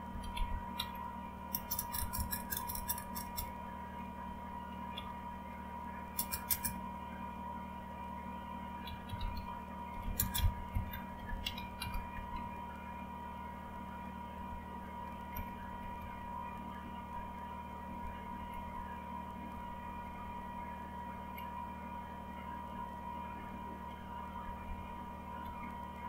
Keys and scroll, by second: 0.0-3.7 typing, 4.9-6.6 typing, 8.6-12.6 typing, 14.1-17.1 typing, 17.9 Up, 18.3 Up, 18.6 Up, 19.4 Up, 19.7-20.5 typing, 24.3 Down, 24.7 Down, 25.4 Down.